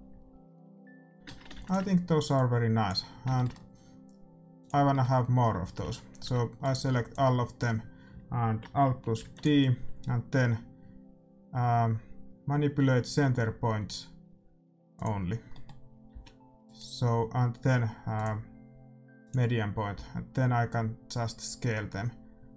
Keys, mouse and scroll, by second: 1.4 shift+z, 1.7 ctrl+s, 2.3-4.2 drag, 3.0-5.6 middle drag, 4.5-6.5 drag, 5.6 a, 5.8 a, 6.2 b, 9.2 alt+d, 15.0-16.7 drag, 15.5-17.1 middle drag, 16.0 s, 18.2-19.8 drag, 20.0 s.